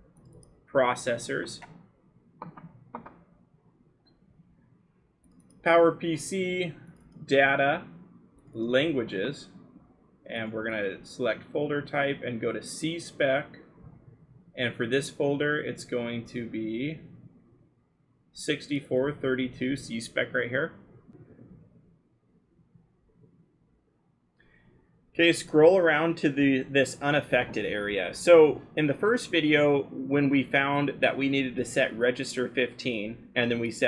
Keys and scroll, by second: 1.7 scroll, 22.3 scroll.